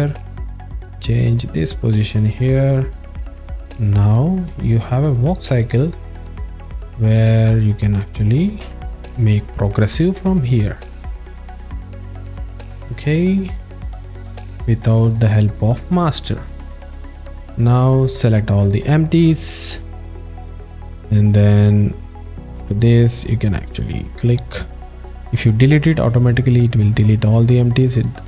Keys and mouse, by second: 1.0 click, 2.1 alt+middle click, 3.4 click, 8.7 s, 9.2-9.8 drag, 10.1 w, 12.5 s, 13.5-16.1 drag, 16.7 alt+shift+middle click, 17.2 ctrl+alt+middle drag, 17.7 alt+middle click, 18.6 click, 20.5 click, 21.0-23.8 drag.